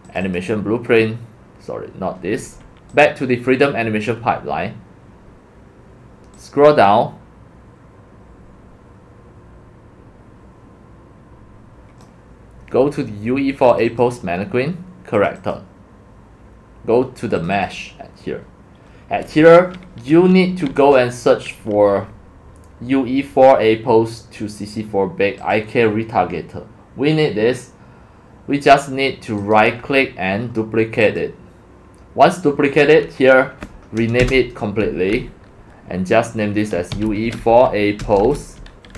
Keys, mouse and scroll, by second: 0.2 click, 0.4 click, 3.1 click, 6.4-7.3 drag, 8.7 click, 12.0-13.8 drag, 13.9 click, 15.1 click, 15.4 click, 17.3 click, 17.9-19.6 drag, 25.5-29.3 drag, 34.2 BackSpace, 36.7-38.9 typing.